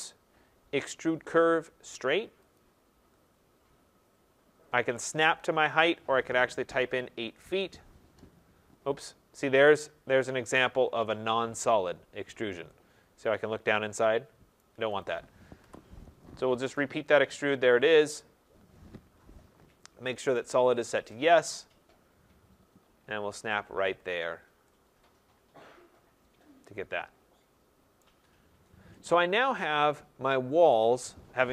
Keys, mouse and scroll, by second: 2.5 click, 6.6-7.4 typing, 9.8 middle click, 10.0 middle click, 14.5 right click, 14.9 click, 15.6 Delete, 16.7 right click, 17.3 click, 19.0 Return, 20.3 click, 21.2 middle click, 21.3 middle click, 21.3 middle click, 21.7 middle click, 23.5 click, 24.2 middle click, 25.1 middle click, 27.9 right click, 28.4 middle click, 28.6 middle click, 28.9-29.3 scroll, 30.6 right click, 30.9 middle click, 31.0 middle click.